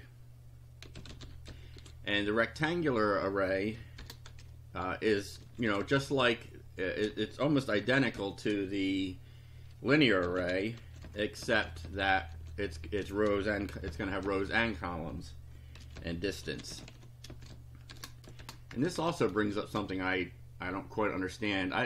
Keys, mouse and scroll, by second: 0.0-2.3 typing, 4.0 shift+-, 5.2-8.2 typing, 10.0-12.8 typing, 13.9 ,, 14.3 space, 15.5-18.4 typing, 18.7 shift+Return, 19.6 shift+].